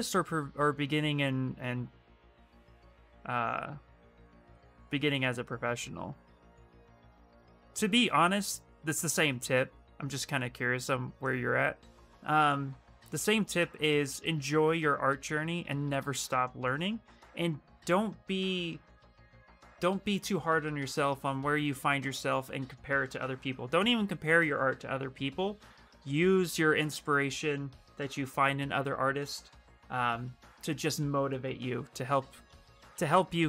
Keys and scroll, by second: 32.7 shift+f.